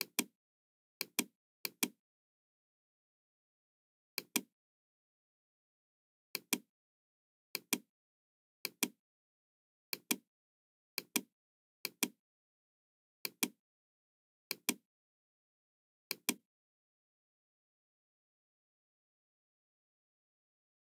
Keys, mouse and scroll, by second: 0.0 click, 1.0 click, 1.6 click, 4.1 click, 6.2 click, 7.4 click, 8.5 click, 9.8 click, 10.9 click, 11.7 click, 13.1 click, 14.4 click, 16.0 click.